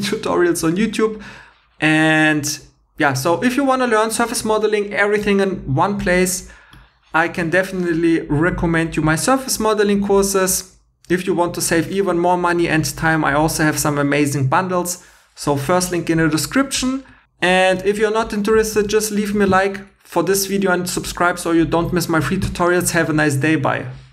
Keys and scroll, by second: 18.7 super+Tab.